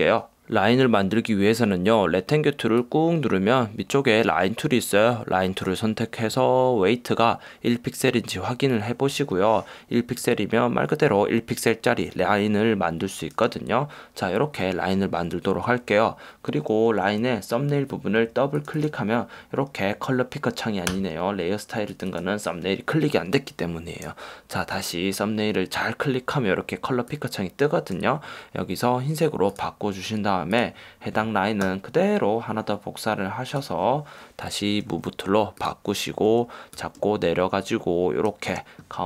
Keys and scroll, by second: 21.1 BackSpace.